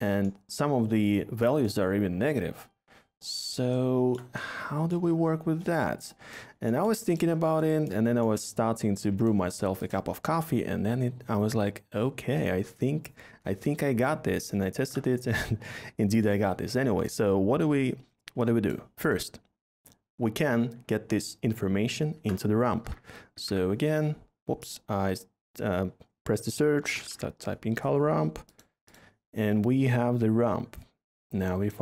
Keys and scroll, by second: 14.6 a, 22.1-23.4 typing, 26.5-27.2 typing.